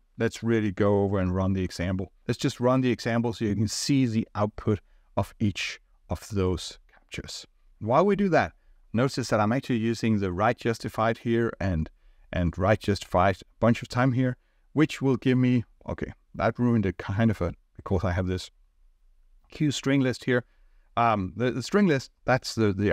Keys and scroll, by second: 2.2 ctrl+r.